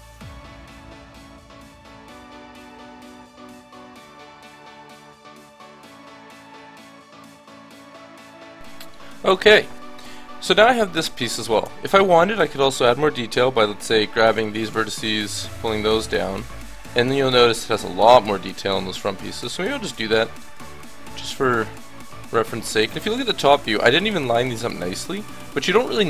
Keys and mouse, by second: 0.0-8.1 typing, 0.0 ctrl+z, 0.1 ctrl+z, 1.2 Tab, 1.3 Tab, 1.9 Tab, 2.1 ctrl+z, 3.4 ctrl+z, 5.7 Tab, 5.9 Tab, 8.3 Tab, 8.7 click, 9.4 middle click, 10.0 KP_1, 11.6 Tab, 12.8 a, 15.3-17.6 middle drag, 16.2 Tab, 18.4 Tab, 19.5 ctrl+z, 19.9 ctrl+z, 22.1 KP_7.